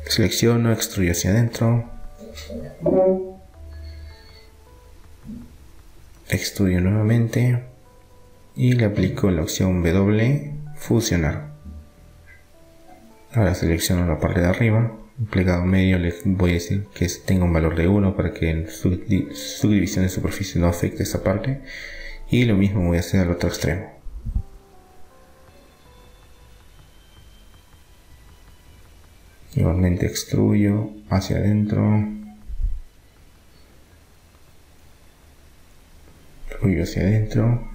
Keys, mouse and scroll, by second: 2.6-5.2 middle drag, 7.1 e, 8.6 s, 10.7 w, 13.3-16.0 right drag, 16.3-18.0 drag, 20.4-28.3 middle drag, 27.6 click, 28.3-30.1 right drag, 30.1 e, 31.3 s, 34.7 e, 36.3 s.